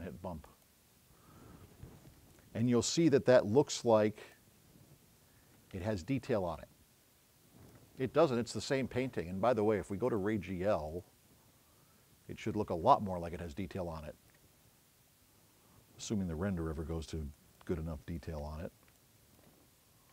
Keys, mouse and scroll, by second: 0.5 click, 3.3 scroll up 1, 4.7-5.2 scroll up 2, 15.4 middle click, 16.8 middle click, 17.6 click, 19.1 click.